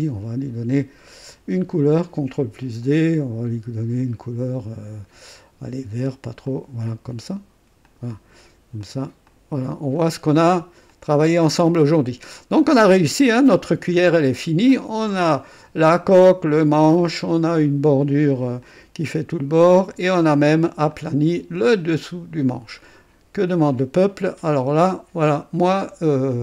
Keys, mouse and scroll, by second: 1.7 ctrl+d, 2.8 ctrl+click, 6.4 click, 7.8 click, 8.8 click, 9.2 click, 10.2-10.6 scroll down 2, 10.9-12.4 drag, 12.7 scroll up 2, 13.2 right click, 14.0 scroll down 1, 14.4 right click, 17.0 click, 18.6 click, 20.1 click, 20.9-21.9 drag, 22.0 click, 22.8 right click, 23.7-26.1 drag, 26.3 click.